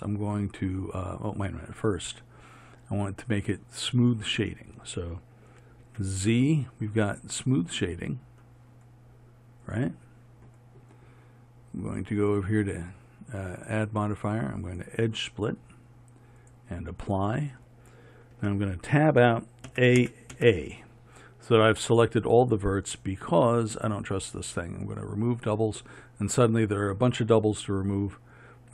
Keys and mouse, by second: 5.9 z, 16.6-18.4 drag, 18.4 Tab, 19.8 a, 24.9-28.3 drag.